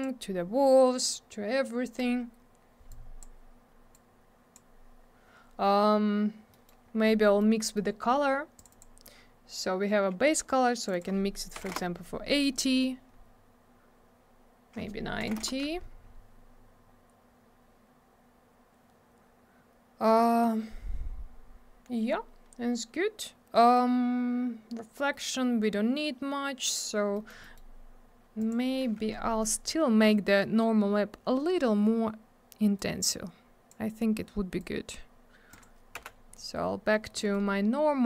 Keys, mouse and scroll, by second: 2.9 click, 3.9 click, 6.5 middle click, 6.7 middle click, 6.9 scroll down 1, 7.3 middle click, 7.4 middle click, 7.5 scroll up 1, 7.6 middle click, 7.8 scroll down 1, 7.9-8.5 scroll up 1, 8.6 click, 8.6 click, 8.7 click, 8.8 click, 10.8 click, 10.9 click, 10.9 click, 11.0 click, 11.6 8, 11.7 Return, 13.1 scroll up 1, 13.8-15.2 scroll down 1, 15.2 9, 15.4 Return, 27.2 middle click, 27.3 middle click, 27.4 middle click, 27.6 middle click, 28.4 click, 28.5 click, 29.3 scroll up 1, 32.8 click, 34.6 click, 35.5 click, 35.6 click, 36.0 m, 36.9 middle click, 37.0 middle click, 37.2 middle click, 37.3 middle click.